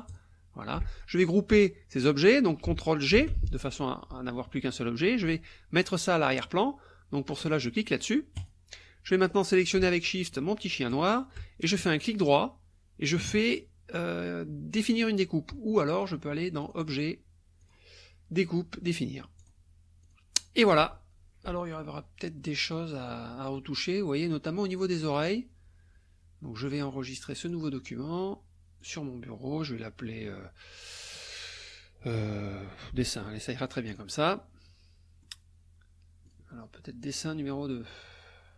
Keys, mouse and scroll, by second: 0.1 shift+click, 3.1 ctrl+g, 8.4 click, 10.9 shift+click, 12.1 click, 16.6 click, 17.6 click, 19.4 click, 20.0 click, 20.6 click, 22.4-22.9 drag, 23.3 click, 27.4 click, 28.8 click, 33.9 click, 34.6-35.4 drag, 36.2 click.